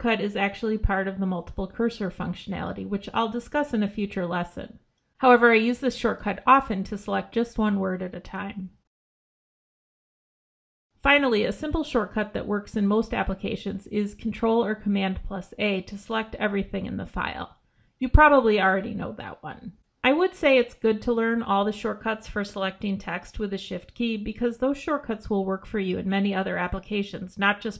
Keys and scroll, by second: 0.6 ctrl+b, 4.2 ctrl+b, 6.4 ctrl+b, 8.7 ctrl+b, 18.1 ctrl+a.